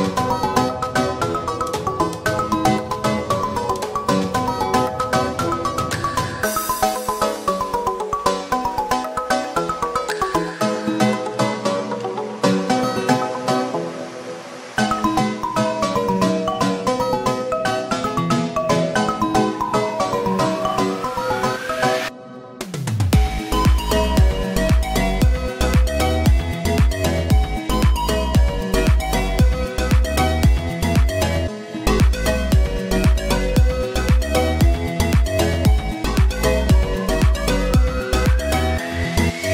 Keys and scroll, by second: 10.5 Down, 37.2 ctrl+z.